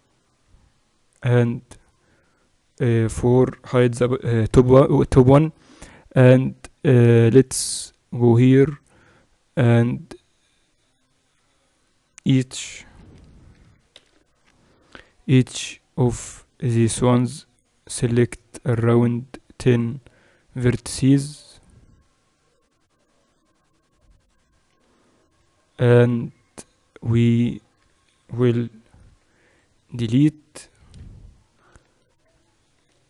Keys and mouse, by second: 1.2-3.1 drag, 1.2-7.4 right drag, 3.8 h, 4.4 KP_7, 6.2 Tab, 8.5 middle click, 12.9 c, 13.8 a, 14.0 a, 14.8 c, 29.0 x, 30.5-33.0 middle drag.